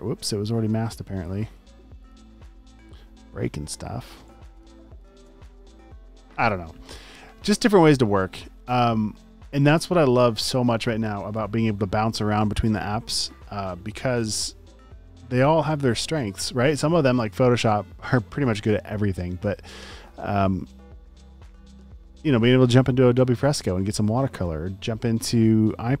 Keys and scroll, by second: 4.2 space, 4.7 alt+super+space, 12.4 super+s.